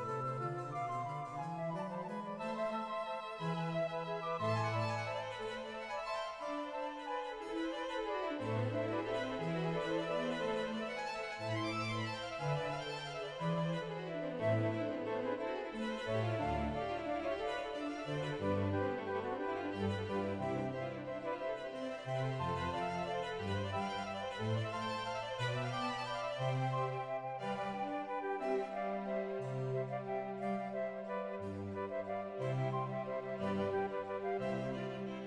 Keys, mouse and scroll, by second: 1.1 scroll up 1, 2.4 middle click, 2.4 right click, 4.0 shift+middle click, 4.3 right click, 5.0 click, 5.0 e, 5.0 1, 7.1 shift+middle click, 7.1-7.7 scroll down 1, 8.9 middle click, 9.9 right click, 9.9 shift+e, 10.3 ctrl+click, 10.3 1, 11.7 right click, 12.0 ctrl+r, 12.3 right click, 13.0 shift+middle click, 13.0 scroll up 3, 13.5 shift+middle click, 13.5 ctrl+right click, 14.2 shift+right click, 14.6 shift+middle click, 14.6 ctrl+right click, 14.6-14.9 scroll up 3, 15.5 shift+middle click, 15.5 ctrl+right click, 16.3 shift+middle click, 17.4 click, 17.4 right click, 18.5 shift+middle click, 18.5 scroll up 2, 18.6 right click, 19.7 shift+middle click, 19.7 shift+right click, 19.7 x, 20.3-21.4 drag, 21.4 right click, 21.4-21.7 scroll down 4, 22.1 ctrl+click, 22.1 ctrl+right click, 22.3 middle click, 22.3 g, 23.3 r, 23.3 x, 23.6 shift+click, 23.6 shift+middle click, 23.6-24.3 scroll down 2, 25.0 2, 25.3-26.4 scroll down 2, 26.4 click, 26.6 right click, 26.7 g, 27.1 click, 27.2 ctrl+right click, 27.8 click, 28.7 shift+middle click, 28.9 scroll down 2, 29.0 right click, 29.1 ctrl+right click, 29.2 shift+middle click, 29.3 g, 29.7 click, 29.8-31.3 middle drag, 29.8 a, 31.3 click, 34.0 right click, 34.0 g.